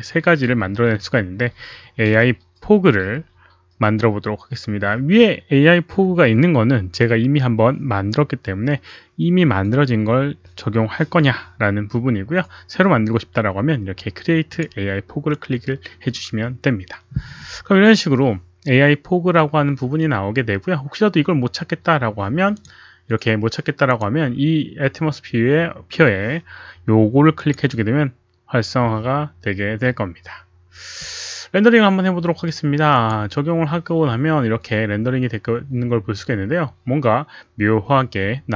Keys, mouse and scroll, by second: 14.5 click, 19.4 click, 22.5 click, 23.8 click, 27.3 click, 32.9 click.